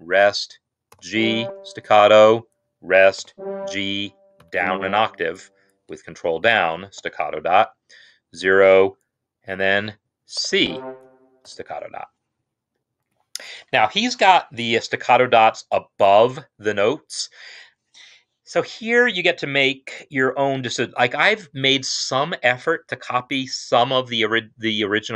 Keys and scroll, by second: 0.1 0, 0.8 g, 1.3 shift+s, 2.4-3.0 typing, 4.2 ctrl+Down, 6.8 shift+s, 8.1 0, 10.0 typing, 11.4 typing, 12.4-13.2 typing.